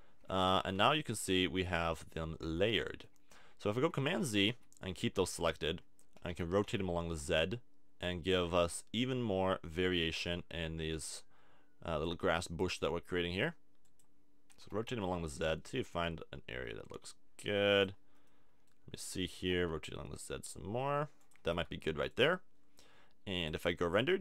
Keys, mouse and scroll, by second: 0.5 a, 0.7 Tab, 2.4 Tab, 4.2 z, 4.5 z, 6.3 r, 14.0-15.6 drag, 14.6 r, 17.8 click, 18.4-19.8 middle drag, 19.3 r, 21.3 click, 21.4 a, 21.6 Tab.